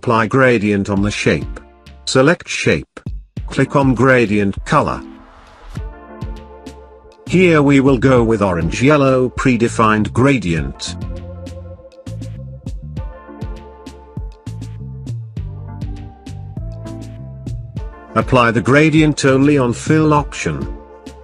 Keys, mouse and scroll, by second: 5.2 click, 12.6 click, 16.0 click, 20.7 click.